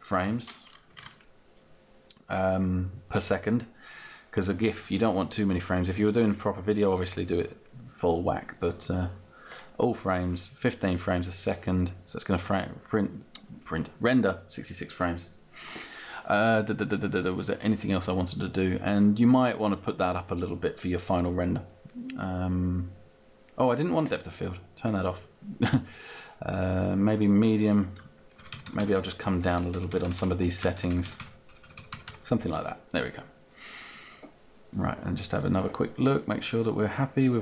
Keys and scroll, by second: 0.7-1.6 typing, 28.2 Down.